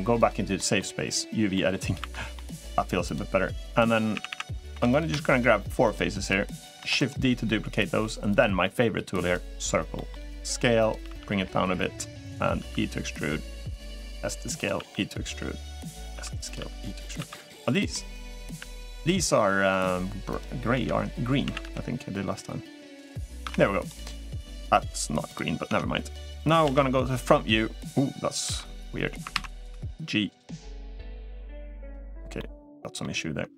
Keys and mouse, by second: 0.0 ctrl+z, 0.3 middle click, 1.3 middle click, 2.1 middle click, 2.1 3, 2.8 click, 3.9 a, 4.0 a, 5.2 3, 5.9 shift+click, 6.6 shift+d, 9.7 middle click, 10.1 s, 10.8 g, 12.8 e, 14.1 s, 14.6 e, 17.6 s, 17.7 middle click, 18.9 r, 18.9 g, 20.7 l, 23.6 Tab, 23.6 click, 23.6 a, 23.6 g, 26.4 Tab, 26.4 KP_1, 28.3 h, 30.1 ctrl+z, 30.1 g, 32.1 middle click, 32.1 g.